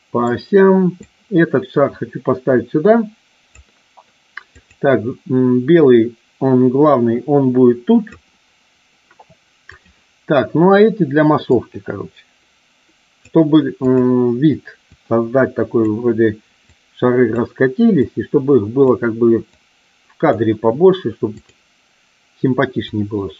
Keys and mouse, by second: 1.0-3.5 drag, 4.5 click, 5.7-8.1 drag, 9.7 click, 11.3-13.2 drag, 13.8 click, 14.7-15.7 drag, 16.7 click, 18.0 click, 19.5-20.2 drag, 21.2 click, 22.7-23.3 drag.